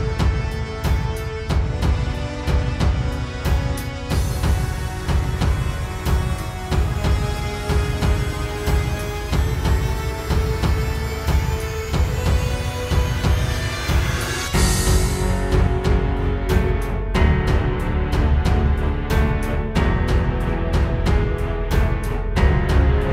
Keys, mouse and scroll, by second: 1.5 right click, 3.2 click, 6.3 click, 9.8 click, 17.4 click, 18.8 click, 19.9 click, 20.1 click, 20.5 click.